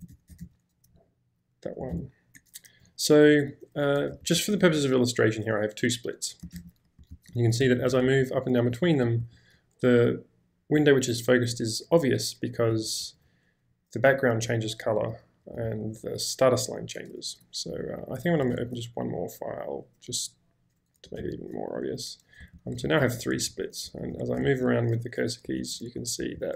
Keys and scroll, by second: 0.0-0.9 typing, 2.0 ctrl+s, 4.2 ctrl+k, 6.5 ctrl+j, 7.1 ctrl+k, 7.6 ctrl+j, 8.2 ctrl+k, 8.7 ctrl+j, 9.3 ctrl+k, 13.0 ctrl+j, 15.6 ctrl+k, 18.5 space, 18.6 t, 21.3 ctrl+v, 22.5 ctrl+h, 23.0 ctrl+j, 23.5 ctrl+k, 24.5 ctrl+h, 25.6 ctrl+l, 26.2 BackSpace, 26.4 ctrl+k.